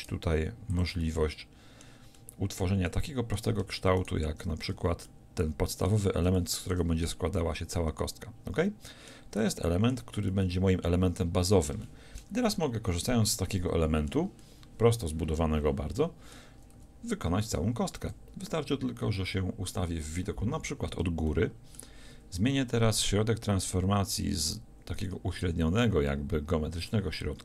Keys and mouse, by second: 0.8 click, 1.4 middle click, 4.0 click, 4.5 f, 4.8 a, 16.8 a, 18.3 KP_1, 19.3 KP_7, 25.4 r.